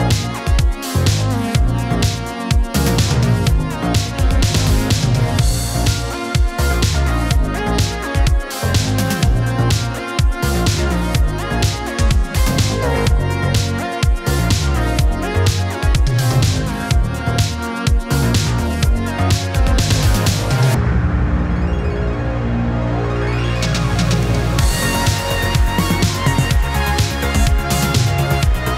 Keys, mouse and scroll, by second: 0.2-0.8 click, 0.8 space, 3.4 space, 4.0 click, 4.5 ctrl+d, 5.4-6.0 click, 8.6-9.2 middle click, 9.7-11.0 shift+drag, 11.1-12.0 scroll up 2, 12.3-14.6 shift+drag, 15.0 ctrl+d, 15.9-18.2 shift+drag, 18.4 ctrl+d, 19.2 middle click, 19.9-22.1 shift+click, 22.4 ctrl+d, 22.9-25.2 shift+drag, 25.6 ctrl+d, 26.3-28.7 drag.